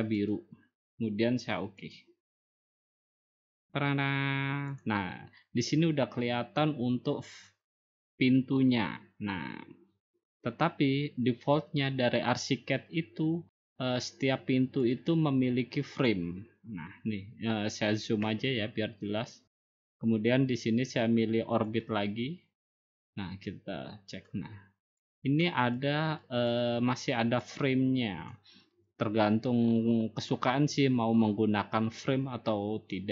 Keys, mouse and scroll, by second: 1.7-2.8 drag, 3.3-4.4 drag, 6.2-7.4 drag, 16.3 click, 17.5 click, 18.2 scroll, 19.2 scroll, 20.4 scroll, 23.2 click, 25.6 click, 26.8 click, 27.6 click, 28.4 click, 29.7 click, 30.5 click, 31.8-32.9 drag.